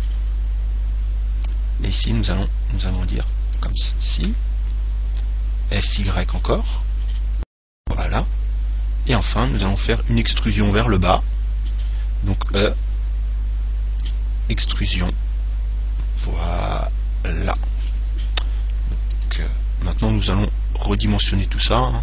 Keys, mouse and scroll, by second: 3.9 click, 5.5 s, 8.3 click, 10.4-12.4 middle drag, 12.8 e, 17.8 click, 21.3 click.